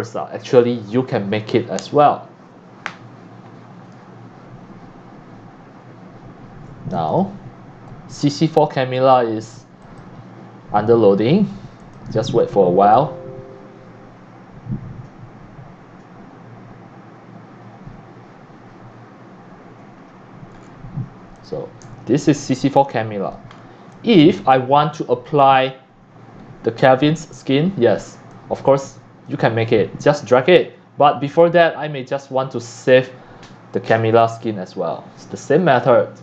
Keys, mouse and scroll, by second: 7.1 click, 9.8 click, 11.8 click, 20.6 scroll down 1, 21.4 click, 21.8 x, 22.2 click, 22.2 x, 22.7 c, 23.0 click, 23.5 scroll down 3, 23.9 x, 23.9 click, 28.2 c, 28.3-29.3 drag, 29.5 scroll up 1, 29.5 click, 35.6 click.